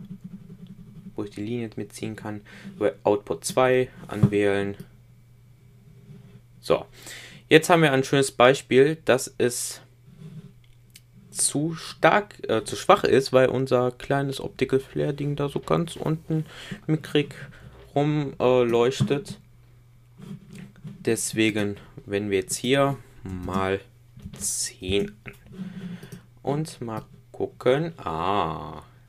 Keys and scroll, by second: 23.3 shift+8.